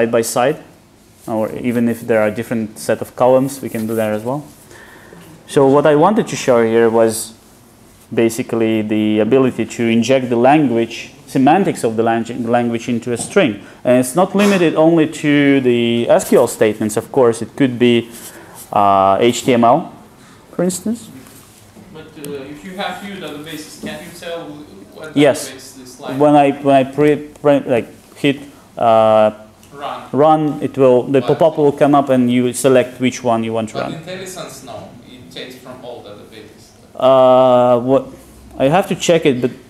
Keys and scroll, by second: 22.3 alt+shift+Left.